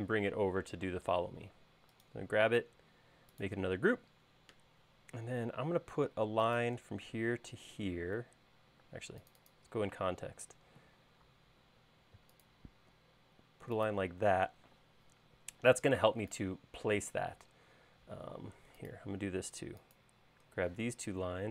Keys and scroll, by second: 5.4 l, 8.9 space, 11.6 q, 14.4 space, 20.8 q.